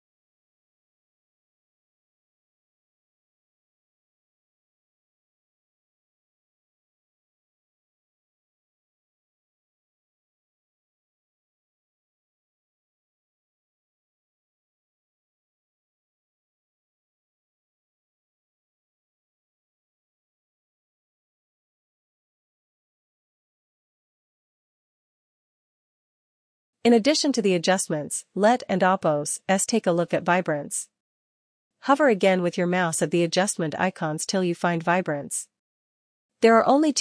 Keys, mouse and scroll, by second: 4.5 click, 12.6 click, 18.1 click, 18.6 click, 19.7 click, 20.7 click, 24.8 click, 25.5 click, 29.4 click, 33.7 click.